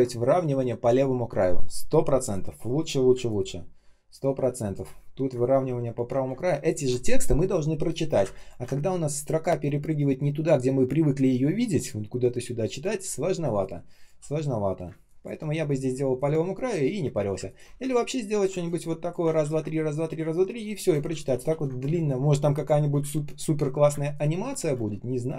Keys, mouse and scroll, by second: 3.0 space, 3.5 space, 3.6 space, 5.0 ctrl+scroll up 1, 5.7 ctrl+scroll down 1, 6.2 space, 6.7 space, 6.7 space, 8.1 space, 8.6 ctrl+scroll up 1, 12.5-13.3 ctrl+scroll down 1, 13.3 space, 13.8 space, 13.8 space, 15.8 space, 16.3 space, 17.6 typing, 18.5 alt+click, 19.3 ctrl+в, 20.7 space, 21.0 ctrl+я, 21.8 space, 22.3 space, 22.3 space, 23.1-23.4 ctrl+scroll up 1, 23.8 space, 24.3 space, 24.4 space, 24.8 ctrl+scroll down 1.